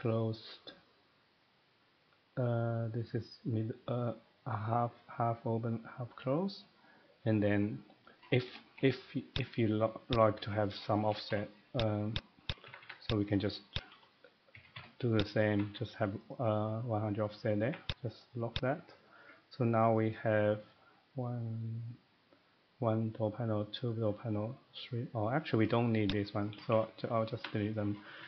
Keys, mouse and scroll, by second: 8.2 middle click, 8.3 middle click, 8.4 middle click, 8.5 typing, 9.4 click, 10.1 click, 10.4 Escape, 10.8-11.5 typing, 10.8 middle click, 10.9 middle click, 11.8 click, 12.2 click, 12.4 click, 12.6 Escape, 12.8 Escape, 13.1 click, 13.3 middle click, 13.7-14.5 typing, 13.7 click, 15.2 click, 15.4 middle click, 15.5 Escape, 15.6 Escape, 16.3 middle click, 17.6 Escape, 17.8 click, 18.1 middle click, 18.5 click, 18.8 Escape, 18.8 middle click, 19.0 middle click, 19.0 scroll down 1, 19.1 Escape, 19.8 middle click, 19.9-20.3 scroll down 1, 20.3 middle click, 25.5 middle click, 26.1 Escape, 26.1 click, 26.4 middle click, 26.5 typing, 27.3 Escape, 27.7 middle click, 27.9-28.2 scroll, 28.2 middle click.